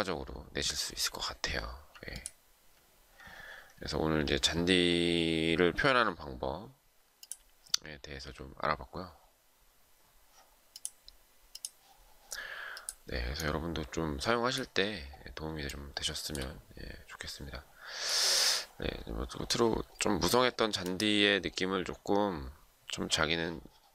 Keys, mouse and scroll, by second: 0.2 alt+scroll up 1, 0.9 alt+scroll down 1, 2.4 alt+scroll up 1, 15.3 shift+middle click.